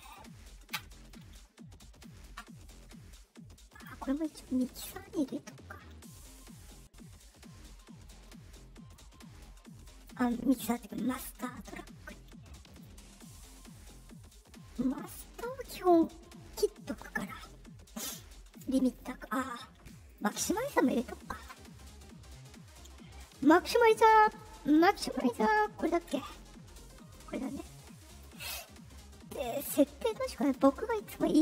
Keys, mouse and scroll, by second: 3.6 click, 8.9-10.0 drag, 12.6 click, 15.8 click, 17.1 click, 20.0 click, 25.7 click, 27.0-28.1 drag, 30.4 click.